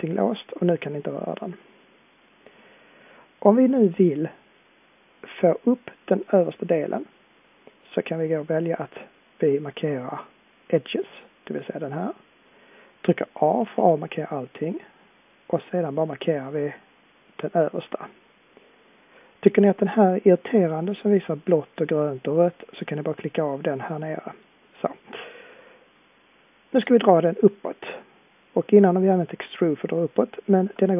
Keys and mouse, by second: 1.8-5.3 middle drag, 13.6 a.